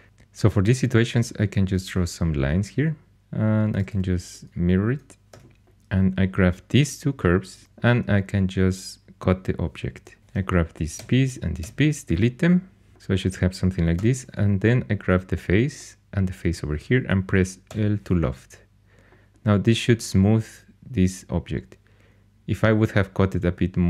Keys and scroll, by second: 1.2 shift+a, 3.7 alt+x, 5.3 2, 7.6 c, 10.2 4, 10.9 x, 13.9 3, 17.7 i.